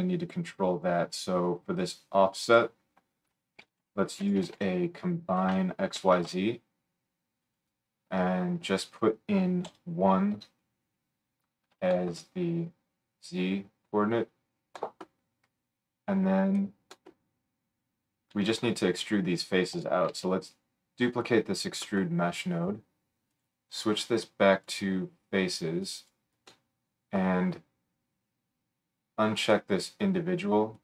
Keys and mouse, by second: 7.6-8.9 right drag, 8.9-16.9 middle drag, 16.9 right click, 17.1-23.3 drag, 20.1 shift+d, 29.5-30.7 drag.